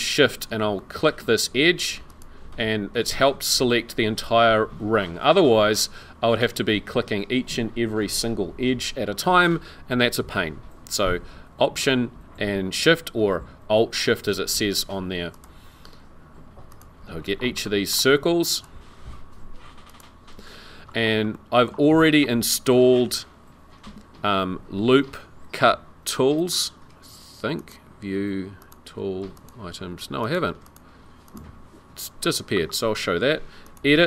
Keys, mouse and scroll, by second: 0.7 middle click, 2.1 alt+shift+click, 15.3 alt+shift+click, 17.2 scroll down 3, 17.6 shift+middle click, 18.5 alt+shift+click, 20.9 scroll up 2, 21.3 shift+middle click, 23.8 n, 27.6 click, 28.6 click, 29.4 click, 30.2 click, 30.6 click, 31.3 click, 32.3 click, 33.7 click.